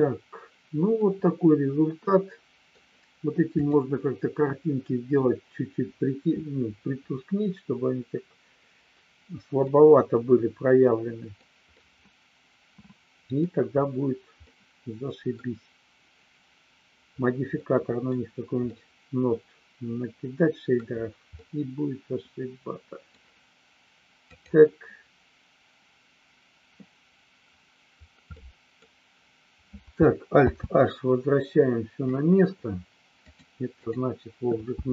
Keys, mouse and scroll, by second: 1.1-2.7 middle drag, 3.5 click, 9.7-11.4 middle drag, 11.7-13.4 middle drag, 14.5 middle click, 17.5 middle click, 18.7-20.7 middle drag, 21.4-23.1 middle drag, 28.3 middle click, 30.4 alt+h, 33.2 click.